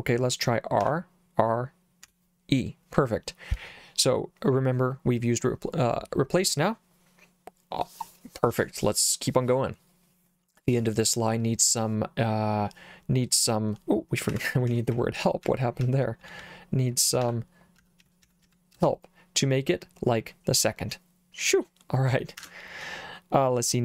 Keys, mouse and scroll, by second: 0.9 r, 2.1 e, 14.4 Escape, 14.7-19.0 typing, 22.4 Escape.